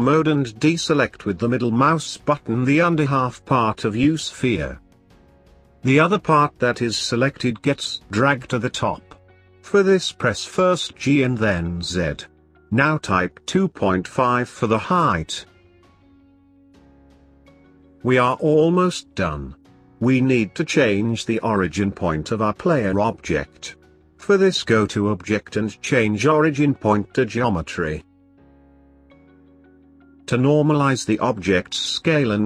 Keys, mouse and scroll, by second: 1.6 click, 3.0 b, 8.8 click, 10.6 g, 13.6-15.2 scroll down 3, 15.2 Tab, 16.3 middle click, 17.3-19.0 scroll down 2, 19.0 click, 20.1 r, 23.3-26.5 drag, 28.0-31.1 middle drag, 31.7 ctrl+a.